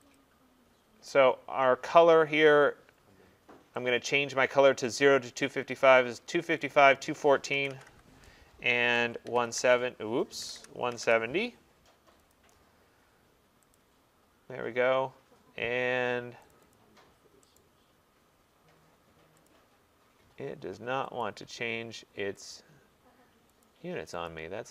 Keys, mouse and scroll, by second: 0.2 click, 3.9 click, 5.1 click, 6.9 click, 7.6-7.9 typing, 9.0 Tab, 9.1-11.1 typing, 12.3 click, 13.8 click, 16.6 click, 16.8 click, 17.6 right click, 19.6 click, 21.3 click, 22.6 click, 23.7 click, 24.3 click.